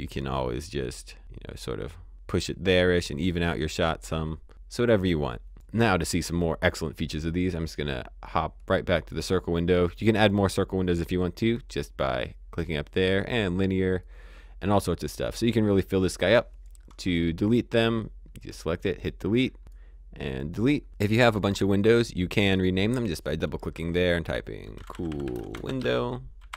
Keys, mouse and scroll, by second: 3.7 click, 5.5 click, 8.6 click, 11.2 click, 13.1 click, 16.5 click, 19.1-19.5 scroll down 1, 19.5 click, 20.2-20.8 scroll up 1, 21.2 click, 21.9-22.3 scroll down 1, 22.3 click, 24.5-26.5 typing.